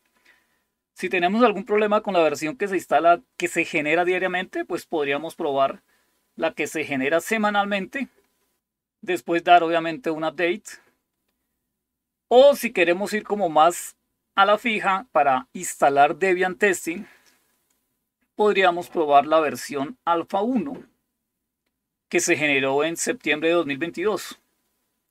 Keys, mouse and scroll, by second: 0.0-0.9 scroll up 2, 4.3-7.3 scroll up 3, 10.6-12.7 scroll up 2, 12.7-13.5 scroll up 1, 17.6-20.3 scroll up 2, 23.2-23.8 scroll up 2, 23.8-25.1 scroll down 2.